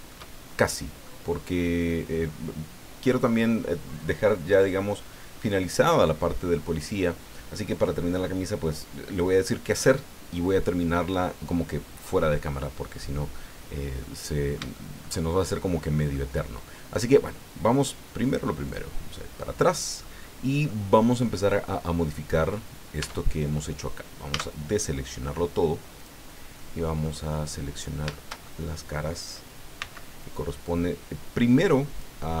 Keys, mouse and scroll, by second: 0.4 shift+scroll down 2, 0.6 shift+click, 1.5-1.8 scroll up 2, 1.9-2.2 scroll down 2, 14.0-15.2 drag, 15.3 shift+scroll up 2, 15.7 scroll down 2, 16.1-16.8 middle drag, 18.7 click, 19.4-20.2 middle drag, 20.7-21.4 middle drag, 23.0 Tab, 24.3 a, 26.0 click, 26.5 click, 27.3 scroll up 1, 27.7 scroll down 1, 28.1-29.1 shift+drag, 29.8 c, 30.6-32.2 drag.